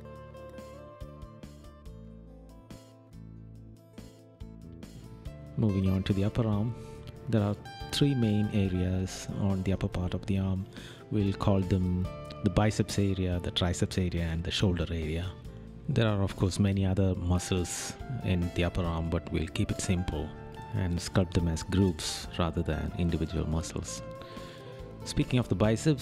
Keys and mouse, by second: 0.2 right click, 2.2 right click, 3.6 right click, 6.9 right click, 7.6 right click, 19.2 right click, 21.4 right click.